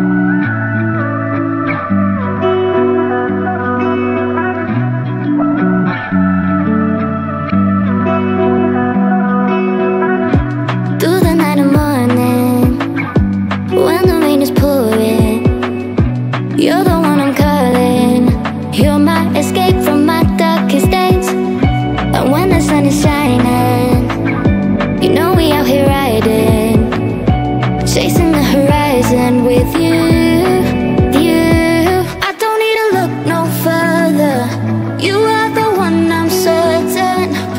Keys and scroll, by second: 15.4 space, 15.7 space, 35.7 space.